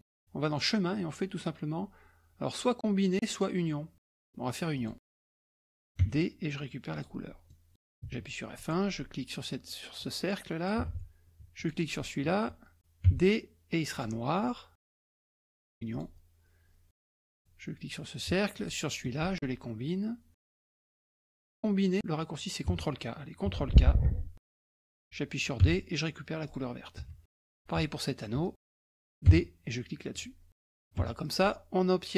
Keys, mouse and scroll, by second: 0.5 click, 4.8 click, 6.1 d, 7.0 click, 7.5 middle click, 8.2 F1, 8.6 click, 10.0 click, 10.9 ctrl+z, 11.6 shift+click, 13.1 d, 14.0 click, 15.3 click, 15.9 click, 17.0 F1, 17.3 click, 18.6 shift+click, 20.7 click, 22.7 Escape, 24.5 ctrl+k, 25.6 d, 26.5 click, 27.0 F1, 27.5 click, 28.4 shift+click, 28.9 ctrl+z, 29.3 d, 30.1 click, 30.7-31.2 ctrl+scroll down 3, 31.0 F1, 31.2-32.1 drag.